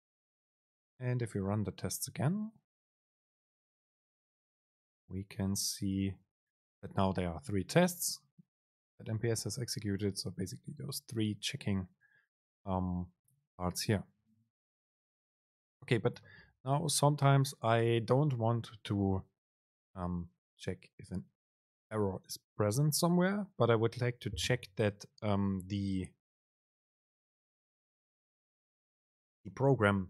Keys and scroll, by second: 3.1 super+r.